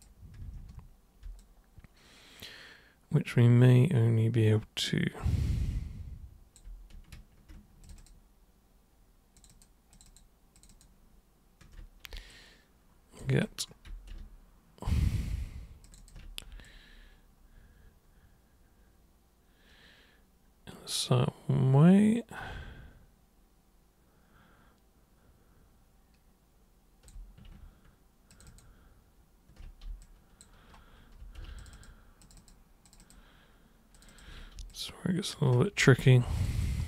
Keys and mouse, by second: 1.4-6.5 alt+super+drag, 7.8 ctrl+shift+super+click, 7.9 ctrl+shift+super+click, 9.4 ctrl+shift+super+click, 9.9 ctrl+shift+super+click, 10.5 ctrl+shift+super+click, 12.2 alt+super+click, 15.8 ctrl+shift+super+click, 16.6-27.0 alt+super+drag, 28.3 ctrl+shift+super+click, 28.5 ctrl+shift+super+click, 30.0 alt+super+click, 31.6 ctrl+shift+super+click, 31.7 ctrl+shift+super+click, 32.2 ctrl+shift+super+click, 32.8 ctrl+shift+super+click, 33.9 ctrl+shift+super+click, 34.7 alt+super+click, 36.3 ctrl+shift+super+click, 36.5 ctrl+shift+super+click.